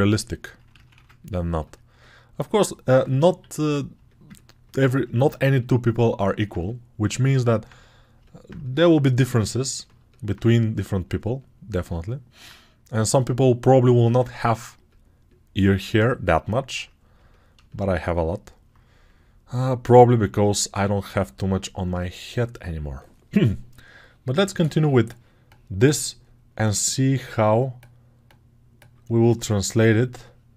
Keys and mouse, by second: 0.6 ctrl+z, 0.8 ctrl+z.